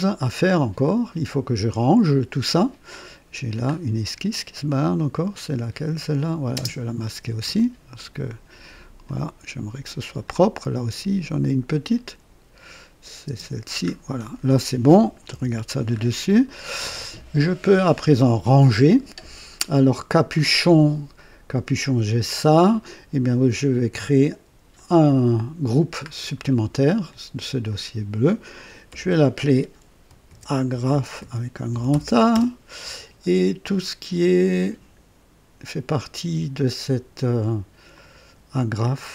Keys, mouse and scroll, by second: 3.6 scroll up 2, 5.1 click, 6.5 space, 7.5-8.9 drag, 9.0-10.4 drag, 11.6 click, 13.2 space, 13.8-14.2 scroll down 1, 15.3 KP_2, 15.9 scroll up 1, 16.4-17.1 right drag, 23.2 click, 24.7 click, 26.0-26.4 scroll down 1, 27.6 click, 28.8 F2, 30.0-32.3 typing, 32.4 Return, 34.5 click, 37.9 ctrl+click.